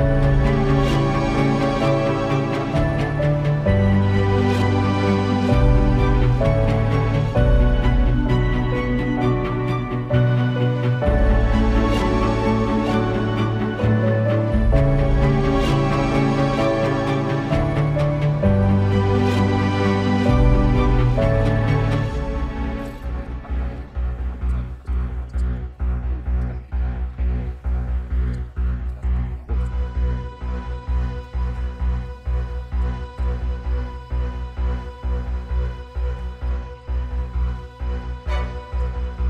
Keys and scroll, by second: 0.2 super+z, 3.7 super+], 4.2 super+[, 5.2 space, 14.1 space, 14.6 space, 14.8 space, 18.6 space, 19.1 space, 20.4 space, 23.7 space, 24.4 super+space, 24.8 super+space, 25.0 super+space, 25.7 super+space, 27.7 super+z, 36.2 super+z.